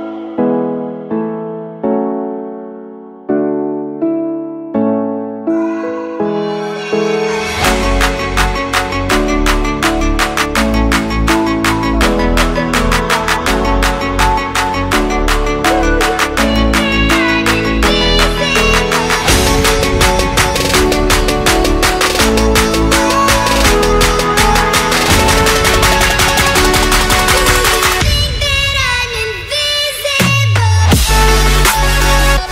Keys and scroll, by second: 23.5 ctrl+Return, 25.5 ctrl+d, 26.9 ctrl+v.